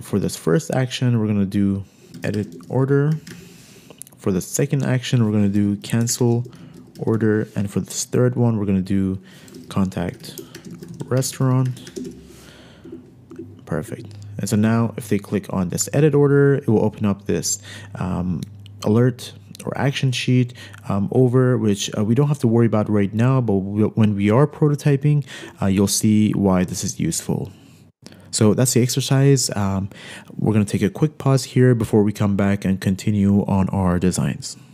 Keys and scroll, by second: 2.2-3.7 typing, 5.9-7.3 typing, 9.8-11.5 typing, 13.4 Escape, 13.9 Escape, 14.4 Escape, 15.2 Escape.